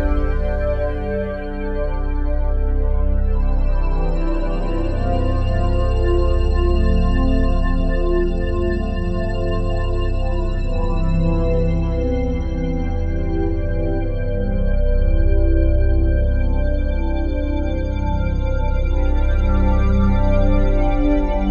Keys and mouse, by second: 0.0-2.5 drag, 3.3-4.3 ctrl+alt+drag, 5.3-6.6 drag, 8.1-10.6 drag, 14.3-17.0 drag, 17.7 ctrl+alt+click, 18.4 ctrl+alt+click, 18.7 ctrl+alt+click, 19.1 alt+click, 19.7 ctrl+alt+click, 20.0 ctrl+alt+click, 20.3 alt+shift+click, 20.9 ctrl+alt+click, 21.3 alt+shift+click.